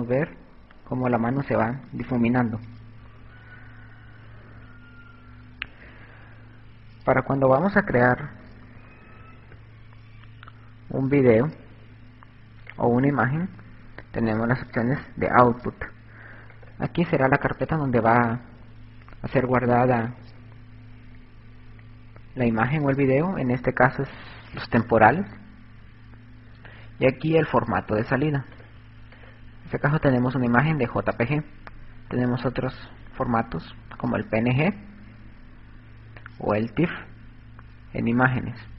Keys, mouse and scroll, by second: 2.5 Escape, 7.8 KP_2, 7.9-10.8 KP_2, 11.6 click, 12.7 click, 16.7 click, 29.6 click.